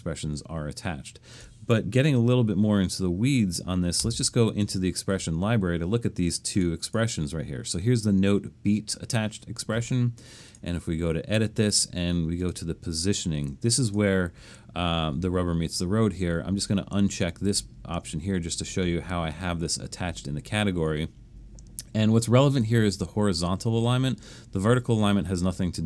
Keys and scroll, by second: 4.0 Return.